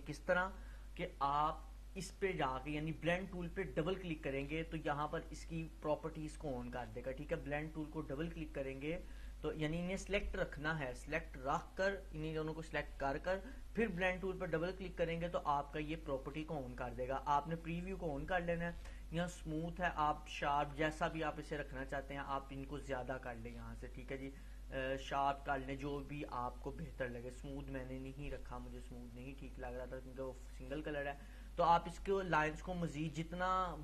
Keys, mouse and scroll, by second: 3.9-9.1 drag, 15.4-16.8 click, 22.8 click, 31.4-33.8 scroll up 1.